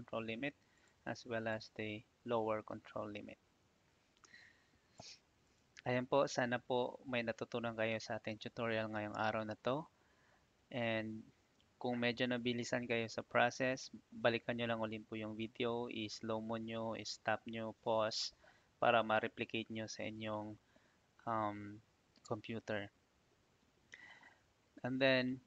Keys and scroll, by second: 0.3 Escape, 3.5 Escape.